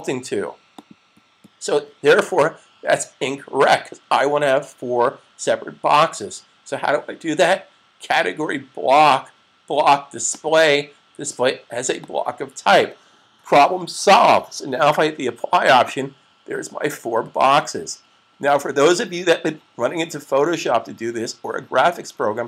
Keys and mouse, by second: 0.5 click, 10.3 click, 15.8 click.